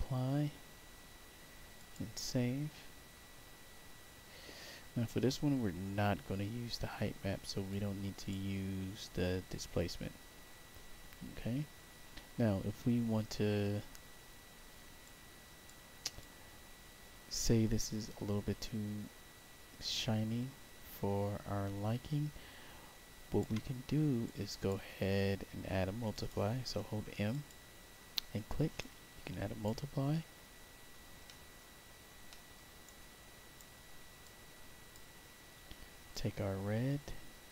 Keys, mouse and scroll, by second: 1.7 click, 5.6 middle click, 6.5 middle click, 7.6 click, 11.9 middle click, 13.4 middle click, 14.0 middle click, 14.2 scroll down 2, 15.0 click, 16.1-23.3 alt+drag, 24.2 click, 25.0 middle click, 26.0 click, 26.7 m, 27.2 click, 28.7 click, 30.2 scroll down 1, 31.2 middle click, 31.8 scroll down 1, 32.2 middle click, 32.8 right click, 34.1 click, 36.0-37.5 drag.